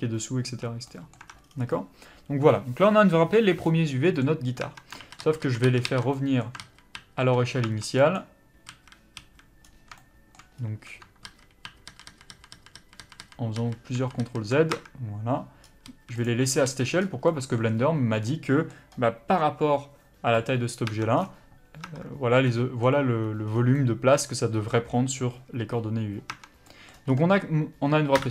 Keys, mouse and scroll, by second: 1.2 Tab, 1.4 scroll down 1, 1.7 middle click, 4.6 Tab, 6.0 ctrl+z, 8.1 click, 8.7 a, 11.3 ctrl+z, 16.0 a, 16.2 click, 16.6 a, 18.2 middle click, 20.9 Tab, 21.2 scroll down 1, 21.9 Tab, 26.3 scroll down 1, 26.4 Tab, 26.7 middle click, 27.1-28.3 scroll up 1.